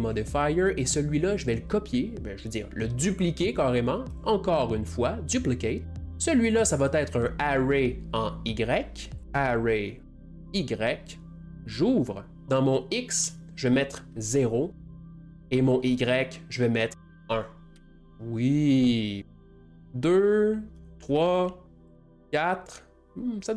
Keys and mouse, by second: 3.2 middle click, 4.1-5.6 drag, 5.6 middle click, 6.0-11.6 drag, 11.9-16.4 drag, 17.0-18.5 drag, 18.9-23.5 drag.